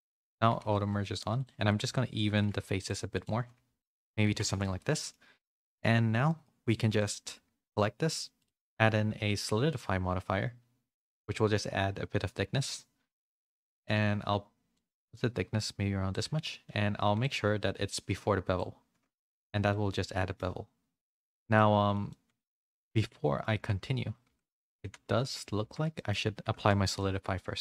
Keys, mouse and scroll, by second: 2.0 click, 2.3 g, 3.1-4.2 drag, 4.2 Tab, 4.4 a, 4.6 a, 4.7 middle click, 5.7 /, 6.2 middle click, 8.3 click, 9.6-12.6 drag, 14.7-16.0 shift+drag, 17.2-18.6 drag, 19.6 shift+middle click, 20.1 middle click, 21.5 shift+middle click, 22.0 middle click, 22.8 middle click, 23.5 Tab, 24.2 z, 25.0 z, 25.6 Tab, 25.9 middle click, 26.2 a, 26.5 a, 26.6 shift+middle click, 26.9 middle click.